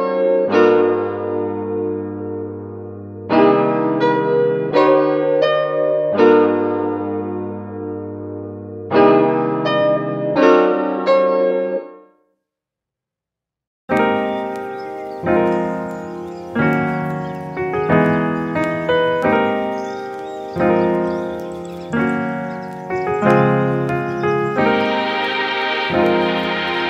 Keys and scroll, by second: 1.9 space.